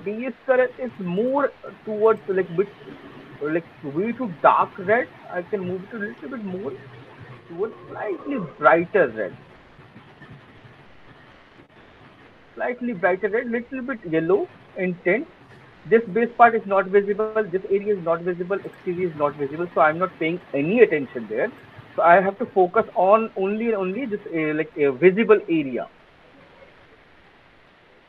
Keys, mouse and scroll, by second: 0.5 alt+click, 2.0 middle click, 3.1 click, 3.1 scroll, 4.7 click, 9.8 click, 12.3 alt+click, 12.3 alt+middle click, 12.9 alt+click, 13.3 alt+middle click, 14.0 alt+click, 14.4 alt+middle click, 15.6 alt+click, 16.7 alt+middle click, 18.0 alt+click, 18.3 alt+click, 19.5 alt+click, 21.9 alt+click, 22.4 alt+middle click, 22.8 alt+right click.